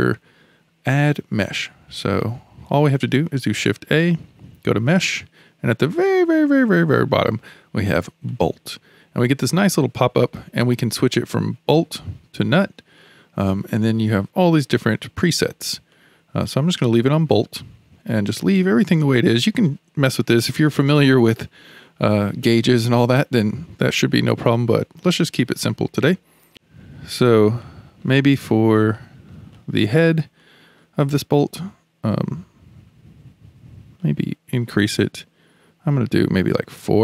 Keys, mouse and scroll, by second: 3.7 shift+a, 11.8-13.0 drag, 13.7-16.0 drag, 16.7 click, 25.2-26.2 scroll up 6, 26.2-27.4 shift+middle drag, 27.6-28.2 shift+middle drag, 28.2-28.9 scroll up 2, 28.9-30.9 shift+middle drag, 30.9-32.9 scroll up 4, 34.0-37.0 drag.